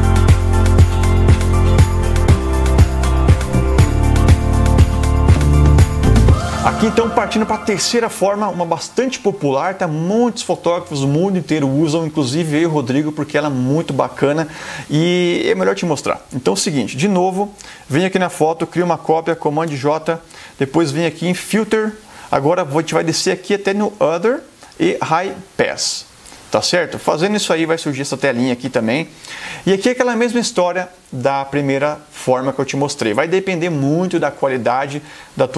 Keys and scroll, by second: 19.4 super+j.